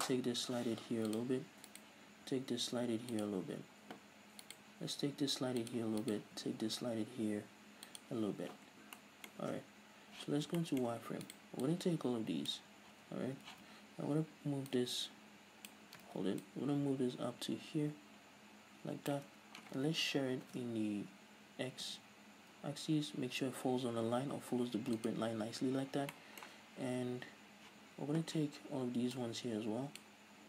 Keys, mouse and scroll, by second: 0.0 g, 1.6 click, 1.9 right click, 2.3 g, 3.8 click, 4.6 right click, 5.0 g, 6.2 right click, 6.5 g, 8.8 click, 9.1 shift+middle click, 10.3 z, 10.8 shift+middle click, 11.4 right click, 11.8 click, 13.1 z, 14.9 click, 16.2 ctrl+z, 16.6-25.3 drag, 20.5 ctrl+alt+shift+s, 26.3-29.3 shift+middle drag, 27.9 z, 29.3 drag.